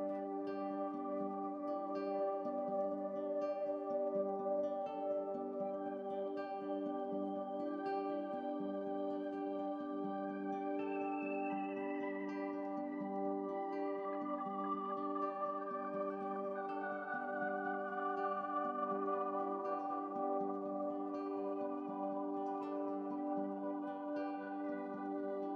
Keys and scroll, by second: 23.7 ctrl+z, 24.9 ctrl+z.